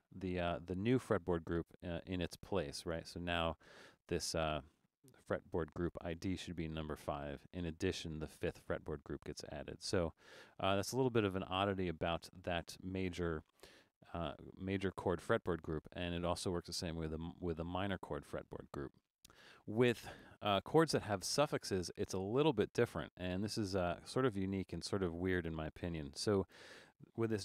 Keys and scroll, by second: 11.6 super+z.